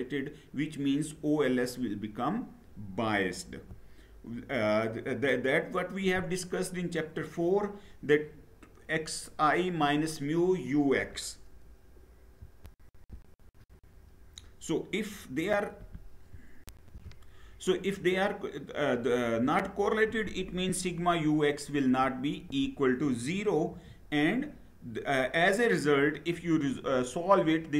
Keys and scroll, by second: 3.6 Down, 12.7 shift+F9, 23.3 Down.